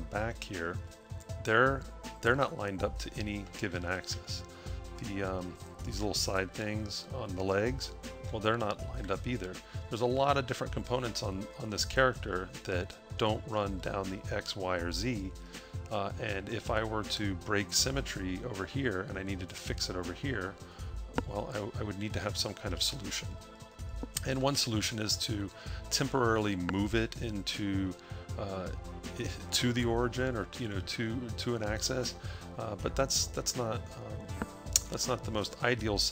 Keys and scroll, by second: 3.8 a, 9.1 a, 22.8 a.